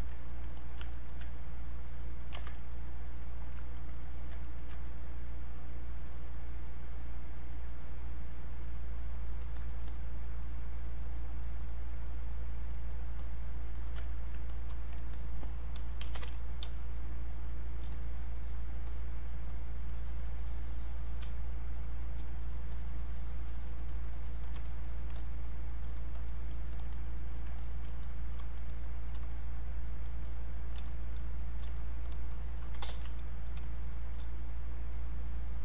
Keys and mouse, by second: 0.2 click, 0.6 alt+click, 0.9 ctrl+right click, 1.6 ctrl+click, 2.4 ctrl+z, 2.7-4.1 drag, 4.4 ctrl+right click, 5.3-9.0 drag, 9.6 alt+click, 14.1 ctrl+right click, 14.5 click, 15.8-17.1 typing, 16.9 click, 17.9-21.3 drag, 21.3 space, 21.8 click, 21.9 space, 22.4-26.0 drag, 27.6 alt+click, 28.5 shift+click, 30.8 space, 31.2 click, 31.3 space, 31.7 shift+click, 32.5-34.1 typing, 33.9 click, 34.3 click.